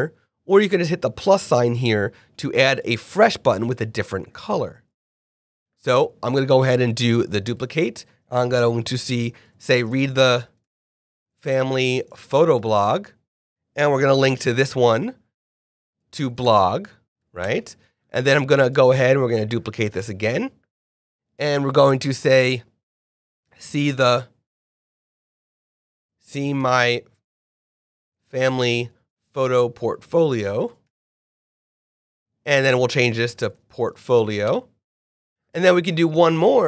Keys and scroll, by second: 5.1 super+z, 7.5 super+a, 8.2 shift+super+a, 9.4-12.5 typing, 13.7 g, 14.2 super+k, 15.8 super+a, 16.0 super+/, 16.1-17.2 typing, 17.4 Return, 21.7 shift+super+Right, 23.3-24.0 typing, 25.6 shift+super+Right, 26.0 shift+super+s, 26.3 e, 26.4 space, 26.6 shift+m, 26.7 y, 27.7-30.8 typing, 32.5 super+a, 32.7 super+/, 32.9-34.4 typing.